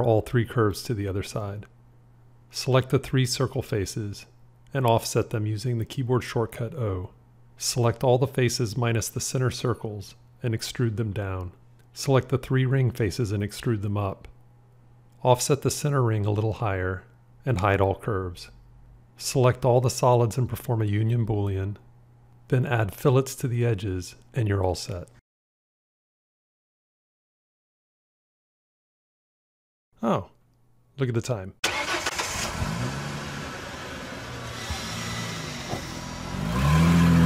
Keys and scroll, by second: 0.0 alt+x, 4.6 o, 18.2 h, 21.2 q.